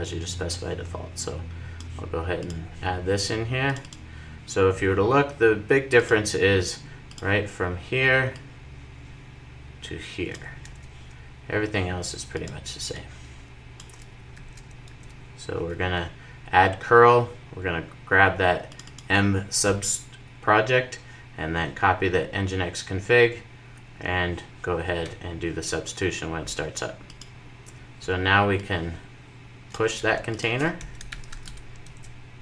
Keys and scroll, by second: 14.0 super+v, 14.3 super+s.